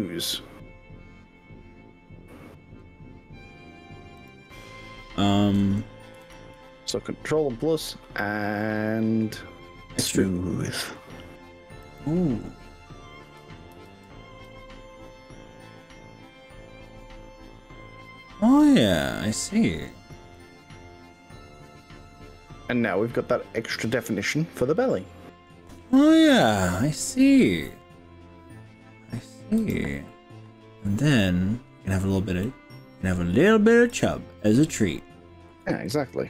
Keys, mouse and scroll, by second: 4.2 click, 6.2 ctrl+KP_Add, 10.8 e, 11.8 click, 13.8 ctrl+z, 14.6 click, 20.4-27.2 middle drag, 27.3-29.3 middle drag, 29.6 click, 30.1-31.2 middle drag, 32.4 middle click, 34.0 click, 34.5-35.6 middle drag, 35.7 g.